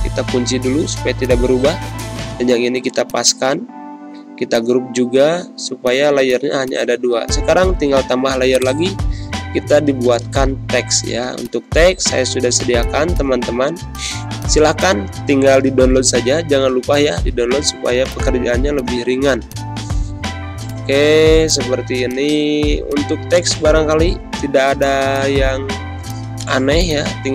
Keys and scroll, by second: 0.5 ctrl+g, 9.2-10.8 typing, 13.6 ctrl+c, 15.3 ctrl+v, 17.4 ctrl+a, 21.1 z, 21.9 space.